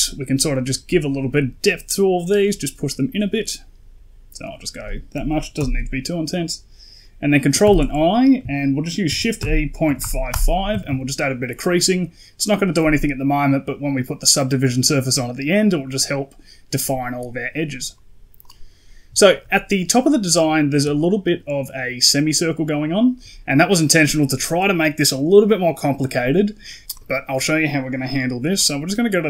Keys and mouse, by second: 7.5 ctrl+i, 8.9 shift+e, 10.6 a, 10.7 a, 13.2 middle click, 17.2 middle click, 18.3 click, 19.1 shift+middle click, 20.7 d, 20.9-22.0 drag, 22.1 d, 22.2 d, 22.6 right click, 26.6 middle click, 26.8 right click.